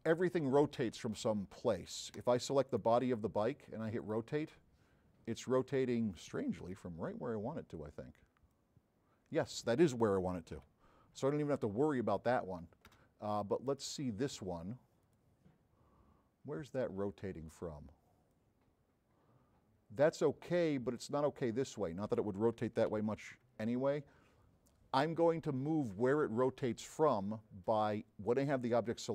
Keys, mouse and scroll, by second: 2.2 click, 2.7 middle click, 5.4 middle click, 5.4-6.0 scroll down 4, 5.8 middle click, 6.7 f, 7.3 middle click, 7.3 scroll down 2, 7.6 middle click, 7.6 scroll up 2, 8.6-9.6 drag, 10.8 z, 13.7 click, 15.1 click, 18.3-20.3 drag, 21.5 click, 22.9 z, 27.4 middle drag.